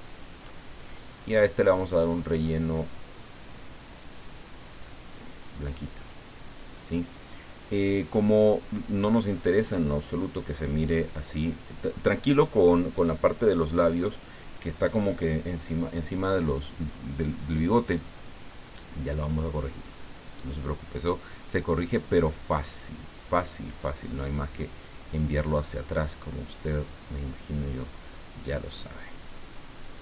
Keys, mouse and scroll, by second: 1.9 click, 5.1-6.3 drag, 17.8 click, 20.0-23.1 drag, 23.8 click, 25.7-27.8 drag, 28.7-30.0 drag.